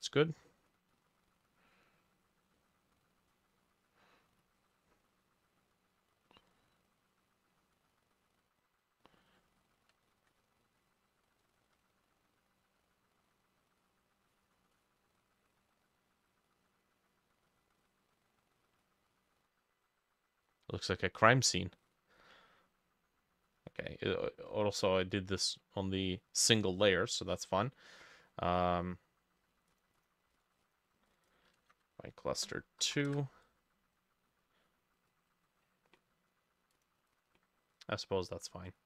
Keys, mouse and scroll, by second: 10.0 ctrl+middle click, 10.1 ctrl+click, 11.5 shift+middle click, 11.6 shift+click, 12.9 double click, 13.7 double click, 15.6 double click, 15.9 double click, 17.8 double click, 19.2 double click, 30.0 double click, 30.4 ctrl+c, 31.1 double click, 31.3 double click, 31.6 ctrl+a, 31.7 ctrl+v, 32.9 BackSpace, 33.0 2, 33.1 Return, 37.2 double click, 38.7 click.